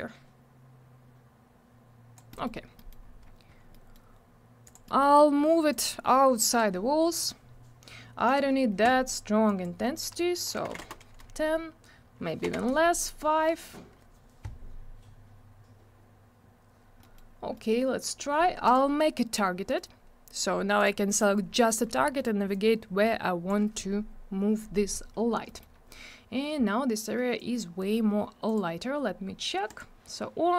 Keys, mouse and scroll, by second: 2.3 middle click, 2.6 scroll down 1, 2.9 double middle click, 3.0 scroll up 1, 3.7 middle click, 4.6 click, 4.8 middle click, 5.0 double middle click, 5.7 click, 8.2 click, 10.6 1, 10.8 Return, 12.5 Return, 17.0 middle click, 17.3 scroll up 1, 17.5 middle click, 18.6 click, 19.6 middle click, 19.8 scroll up 1, 20.3 click, 20.8 double click, 21.2 scroll down 1, 22.5 click, 25.4 middle click, 25.7 scroll up 1, 27.3 click, 28.5 click, 29.7 click.